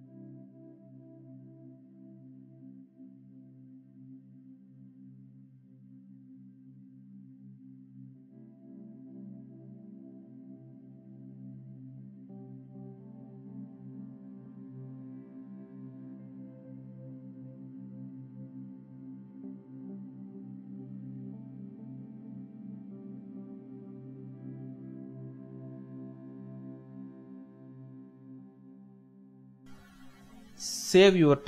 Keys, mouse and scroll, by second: 0.2 alt+shift+click, 1.7 ctrl+c, 3.8 ctrl+v, 4.5 typing, 5.3 ctrl+space, 5.4 ctrl+click, 5.6 ctrl+space, 7.2 ctrl+t, 7.9 alt+shift+click, 8.7 ctrl+shift+z, 9.0 alt+shift+click, 12.1 alt+shift+click, 15.2 shift+click, 21.9 alt+shift+click, 23.9 Up, 24.0 Up, 24.1 Up, 24.2 Up, 24.3 Up, 24.8 Down, 24.9 Down, 25.5 Left, 26.8 shift+click, 29.7 Up, 30.1 Down, 31.1 Return.